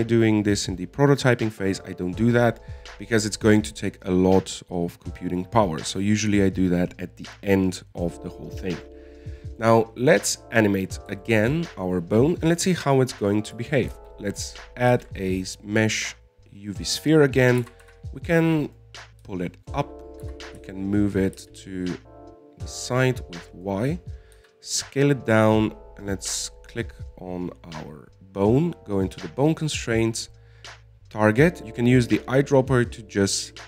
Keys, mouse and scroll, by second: 10.2-11.4 middle drag, 11.4 right click, 12.2-12.6 scroll down 3, 12.6-14.1 shift+middle drag, 14.1-16.2 drag, 16.2 shift+a, 18.5-18.8 scroll up 3, 18.9 g, 20.4-20.9 scroll down 2, 20.9 shift+middle click, 21.6 g, 25.7 s, 28.1 right click, 30.4 click, 31.6 click.